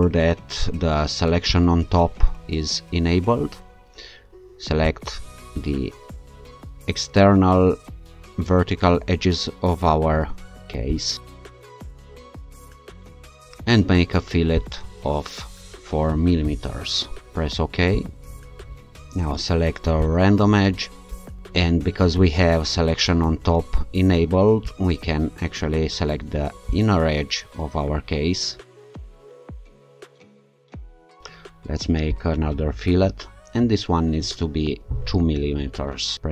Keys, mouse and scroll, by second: 1.5 click, 4.8 click, 9.5-10.4 ctrl+scroll up 2, 10.9 ctrl+click, 11.4 scroll down 1, 12.2 ctrl+click, 12.5 scroll up 1, 13.0 ctrl+click, 13.1 scroll down 1, 14.6 click, 17.9 click, 20.0 click, 21.4-22.2 scroll up 1, 22.2 scroll up 1, 26.7 shift+click, 28.7 scroll down 2, 28.9 scroll up 2, 29.8 ctrl+alt+click, 30.4 ctrl+click, 30.8 scroll up 2, 31.0 ctrl+click, 32.1 click, 34.7 2.